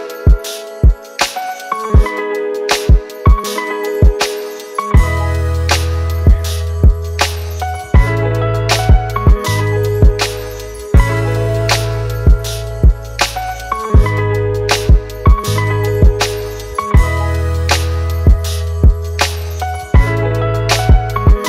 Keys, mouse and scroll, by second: 3.8 Up, 4.1 Up, 4.2 Up, 4.5 Up, 4.6 Up, 5.0 Return.